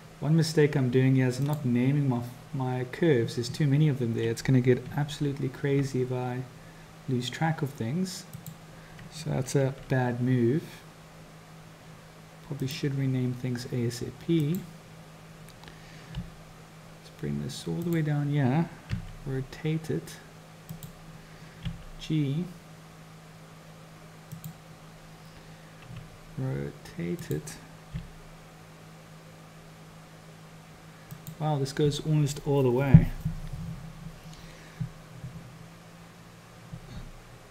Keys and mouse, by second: 5.0 Tab, 8.4-9.7 drag, 9.7 r, 14.5 click, 16.2 g, 18.9 r, 21.7 g, 25.9 r, 28.0 g, 36.9 g.